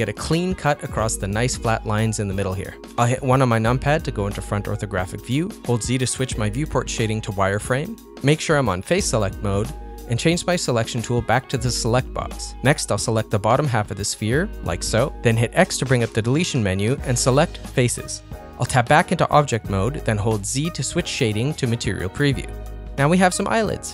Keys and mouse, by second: 0.0 ctrl+middle click, 5.5 Tab, 5.5 ctrl+middle click, 6.1 z, 11.5 click, 11.9-13.4 drag, 14.4 click, 16.1 x, 19.4 Tab, 20.2 middle click, 21.9 z, 22.2 middle click, 22.8 z, 23.7-23.9 middle drag.